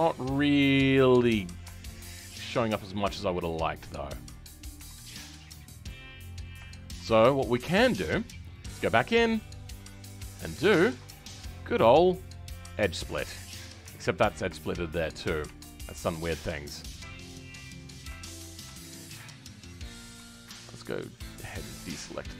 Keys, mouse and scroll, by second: 4.7 Tab, 5.0-5.3 scroll down 2, 5.3-7.0 middle drag, 7.0 Tab, 7.2-8.5 scroll up 1, 8.5-12.6 drag, 12.6 right click, 13.3 middle click, 13.7 Tab, 14.0-14.5 scroll up 2, 14.5 shift+middle click, 15.4 Tab, 20.9 ctrl+click, 22.0 ctrl+click.